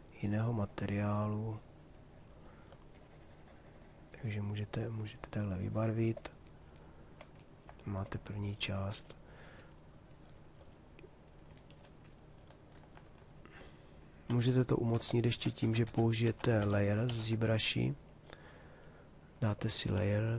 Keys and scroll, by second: 14.0 ctrl+z.